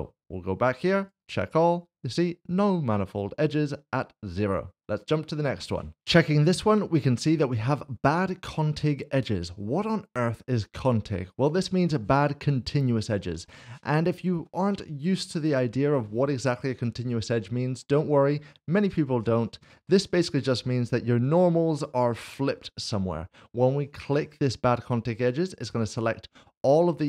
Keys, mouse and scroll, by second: 1.0 click, 6.0 click, 13.4 shift+middle click, 15.4 middle click, 19.8 middle click, 20.9 q, 21.2 click, 21.7 middle click, 24.5 click, 25.2 s, 25.3 shift+middle click, 26.1 middle click.